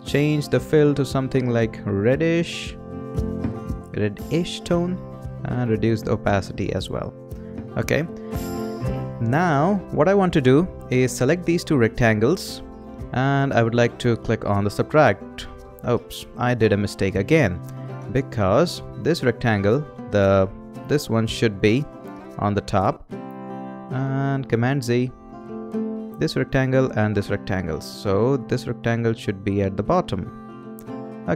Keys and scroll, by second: 16.8 super+z, 24.3 super+z.